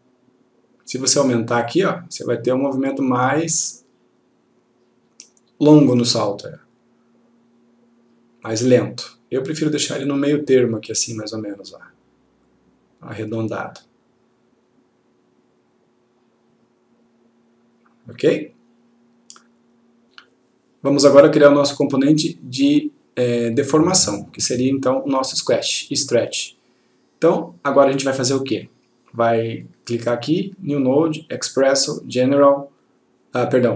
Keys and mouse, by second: 1.8-4.9 click, 9.9-11.1 click, 25.2 click, 29.7 right click.